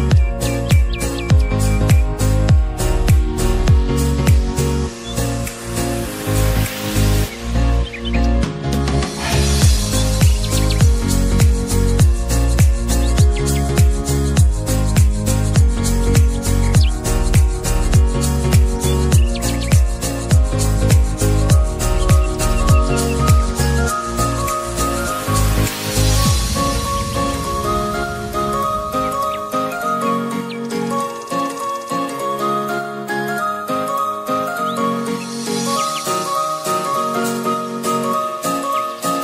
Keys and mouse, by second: 1.1 Up, 1.6 Down, 5.9 Up, 7.1 Down, 8.9 Up, 10.3 Down, 14.6-25.5 drag, 33.6-39.2 drag.